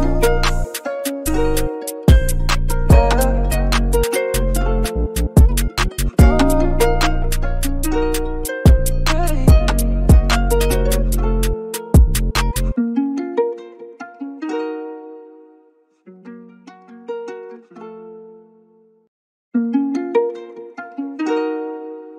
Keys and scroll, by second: 1.1 b, 2.7-4.1 typing, 6.5-7.2 typing, 10.4 typing.